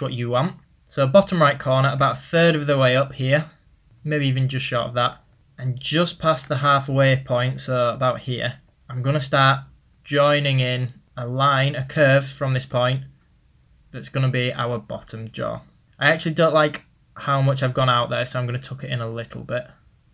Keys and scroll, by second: 5.4 ctrl+z, 7.4 ctrl+z, 12.5 ctrl+z, 17.6 typing.